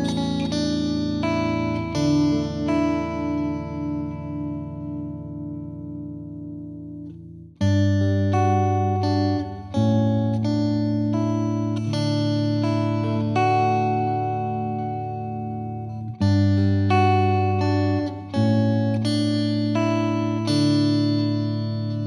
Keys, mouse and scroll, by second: 0.1 scroll up 1, 0.1 Tab, 0.6 KP_1, 0.9 middle click, 1.2 scroll down 1, 1.3-5.0 middle drag, 5.0 KP_1, 5.4 scroll up 1, 5.5 shift+middle click, 5.9 g, 6.9 middle click, 7.1-7.5 scroll down 1, 7.5 i, 10.2 KP_1, 10.6 shift+middle click, 10.9 e, 11.7 scroll down 3, 11.9 middle click, 12.5-12.9 scroll up 8, 12.9 shift+middle click, 13.6 Tab, 13.7 middle drag, 14.0-14.4 scroll down 1, 14.4 middle click, 14.9-16.3 drag, 16.3 middle click, 17.0-19.0 drag, 19.0 scroll up 2, 19.3 shift+middle click, 20.3-21.5 drag, 21.5-22.0 scroll down 1.